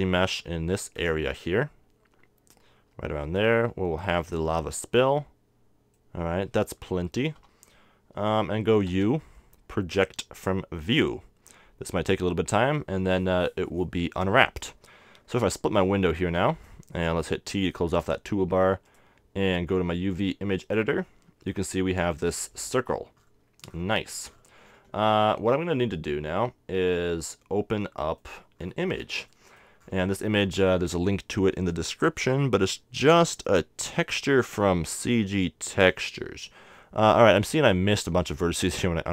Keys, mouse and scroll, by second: 0.1 c, 4.4 right click, 5.0-6.3 middle drag, 7.4 KP_7, 9.0 u, 15.9-17.7 drag, 17.5 t, 18.9-20.8 drag, 22.2-23.7 middle drag, 23.7-25.3 scroll down 1, 25.3-31.0 middle drag, 33.5-38.7 middle drag.